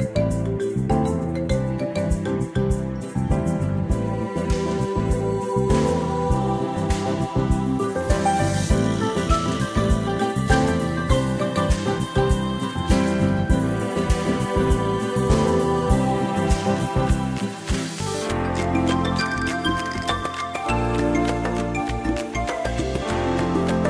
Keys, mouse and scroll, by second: 6.1 click, 9.2 click, 12.8 click, 15.3 click, 19.9 click, 21.1-21.4 ctrl+scroll up 1, 22.1 click, 23.2 ctrl+scroll down 1.